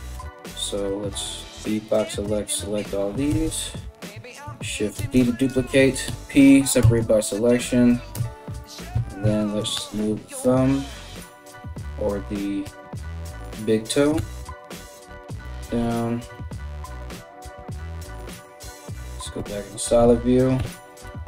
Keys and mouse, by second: 0.8 b, 2.9 KP_1, 4.6 shift+d, 5.6 p, 6.4 Tab, 7.2 right click, 7.2-21.2 middle drag, 7.7 Tab, 8.5 a, 9.3 g, 11.1 KP_3, 12.2 g, 13.8 r, 15.0 KP_Decimal, 16.7 KP_1, 17.9 z, 19.0-21.2 typing.